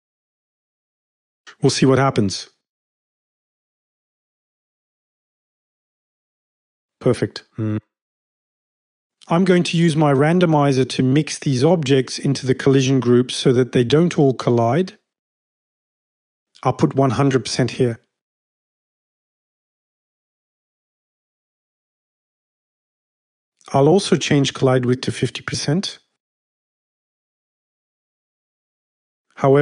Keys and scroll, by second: 2.3 v, 16.4-17.3 typing.